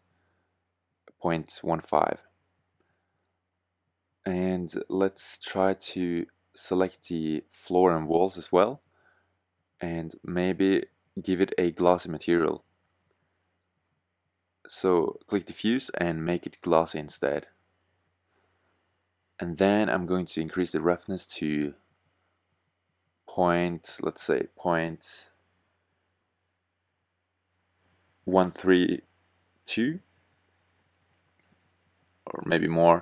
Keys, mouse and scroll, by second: 6.8-7.9 drag, 16.3 middle click, 19.4-20.4 middle drag, 31.1 middle click.